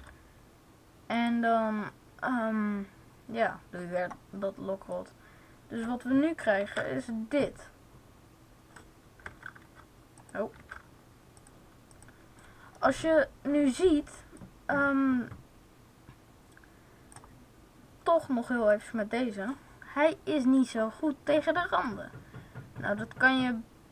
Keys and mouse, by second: 4.9-6.5 drag, 6.5 alt+a, 10.5 alt+super+a, 12.7 click, 14.3-16.2 drag, 18.6-21.6 right drag, 21.6 s.